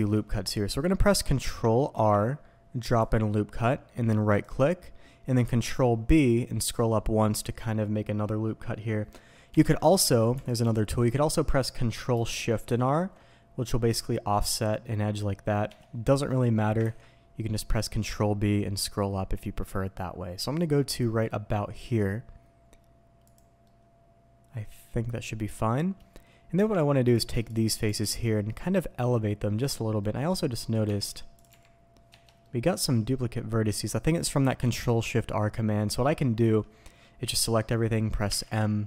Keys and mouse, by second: 0.3 click, 1.9 ctrl+r, 4.2 click, 5.4 ctrl+b, 9.5 Escape, 10.1 alt+a, 10.6 alt+click, 12.7 ctrl+shift+r, 15.6 Escape, 16.9 ctrl+b, 23.2 click, 23.6-24.2 middle drag, 24.2 click, 24.4-24.8 middle drag, 24.8 click, 25.0-25.5 middle drag, 26.5 Tab, 27.8 g, 28.0 z, 29.7 Escape, 30.0 middle click, 30.6 middle click, 30.8 Tab, 31.4 g, 32.1 Escape, 32.4-33.0 drag, 36.4 a, 38.2 m.